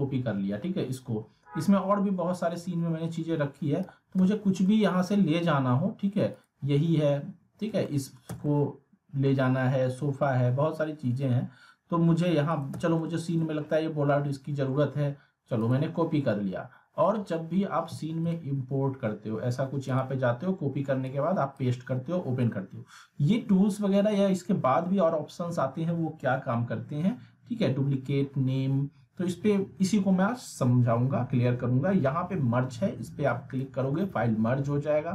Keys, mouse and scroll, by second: 1.2 scroll down 1, 2.5-3.4 middle click, 3.8 x, 4.6-5.6 middle drag, 6.3 click, 7.0 scroll up 1, 7.4 z, 7.8 alt+middle click, 8.3 z, 8.4-9.4 alt+middle click, 9.5-10.1 scroll down 1, 10.1 middle click, 11.0 scroll up 1, 12.6 click, 12.7 z, 13.0-13.6 alt+middle drag, 15.6 click, 18.3-21.7 drag.